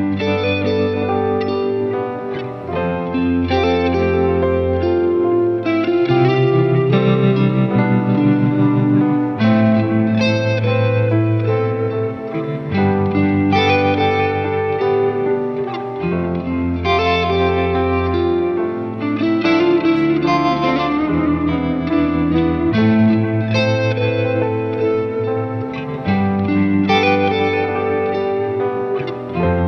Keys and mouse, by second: 1.9 ctrl+z, 3.2 ctrl+z, 3.8 ctrl+z, 4.1 ctrl+z, 5.2 ctrl+z, 6.9 ctrl+z, 7.8 ctrl+z, 12.4 right click, 13.5 ctrl+z, 13.6 ctrl+z, 16.4 ctrl+z, 17.1 ctrl+z, 17.3 ctrl+z, 17.4 ctrl+z, 17.9 ctrl+z, 20.3 ctrl+z, 22.2 ctrl+z, 23.6 right click, 26.4 ctrl+z, 27.4 ctrl+z.